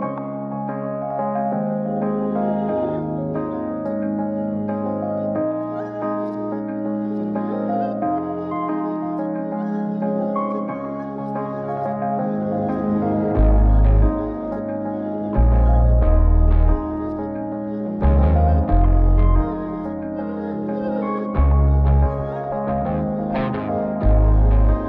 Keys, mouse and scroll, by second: 1.2 Tab, 2.4 click, 6.4 click, 7.0 click, 8.4 click, 9.9-10.8 drag, 11.9 click, 12.7-13.7 scroll down 2, 13.7-14.5 drag, 15.0 scroll down 1, 15.7-19.5 drag, 21.0 click, 22.3 click, 24.3-24.8 drag.